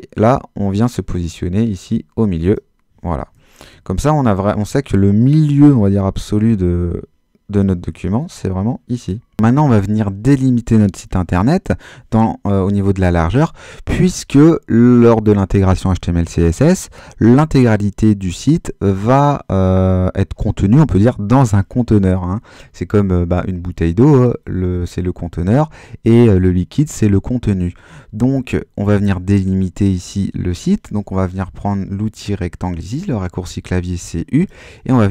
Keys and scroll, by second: 3.6 Home.